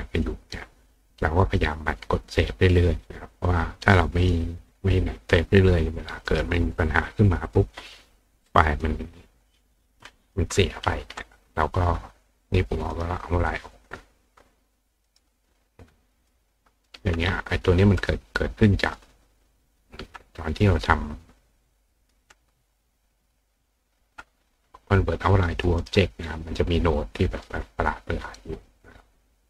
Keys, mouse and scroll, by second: 2.3 click, 4.2 click, 5.1 click, 6.2 right click, 7.1 click, 8.7 click, 9.5 click, 12.9 right click, 13.8 click, 15.0 right click, 16.2 click, 17.7 click, 18.8 click, 19.0 click, 19.5 click, 20.3 click, 21.7-22.1 drag, 22.7 click, 23.6 click, 25.6 click, 25.8 right click, 26.9 click, 28.8 click.